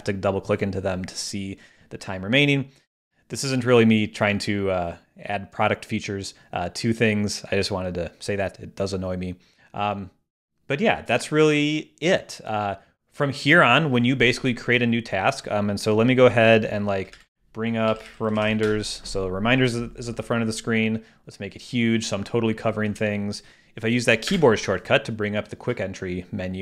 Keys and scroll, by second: 17.1 alt+space, 17.9 alt+r, 24.3 ctrl+space.